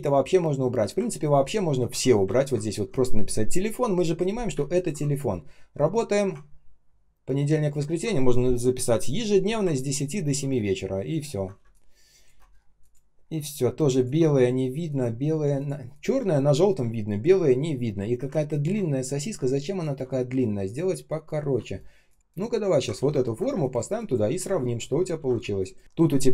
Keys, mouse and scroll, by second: 2.3-3.4 ctrl+scroll down 1, 4.6 ctrl+click, 6.4 ctrl+scroll up 1, 9.7 ctrl+scroll down 1, 10.2 ctrl+s, 10.4-11.5 ctrl+scroll down 1, 11.5 space, 12.0 space, 12.0 space, 12.4 ctrl+scroll down 1, 12.7 ctrl+click, 13.1 ctrl+scroll up 1, 18.4 ctrl+click, 20.6 ctrl+click, 21.1-21.5 ctrl+scroll up 1, 21.5 shift+0, 22.9 ctrl+c, 23.0 ctrl+scroll down 1, 23.4 space, 23.9 space, 24.0 space, 24.4 ctrl+scroll up 1, 25.1 ctrl+v, 25.3 space.